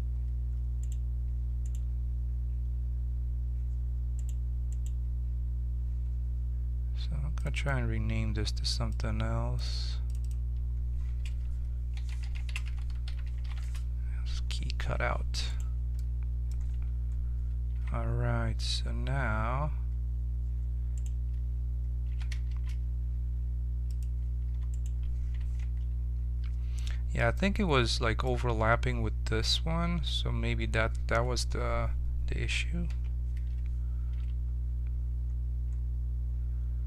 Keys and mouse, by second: 7.3-13.6 drag, 15.4 right click, 15.9-17.7 middle drag, 17.7 z, 21.1 click, 21.2 right click, 22.1 s, 24.7 click, 25.6 ctrl+KP_Subtract, 27.4 middle click, 32.8 KP_7, 34.1 z.